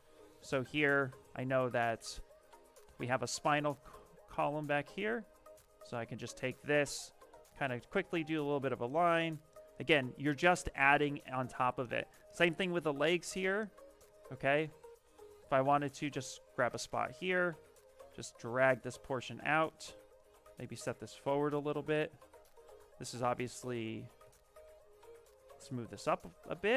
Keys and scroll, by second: 2.5-3.6 typing, 5.4 s, 8.5 shift+f, 12.8 s, 17.2 w, 23.3 x, 24.0 x.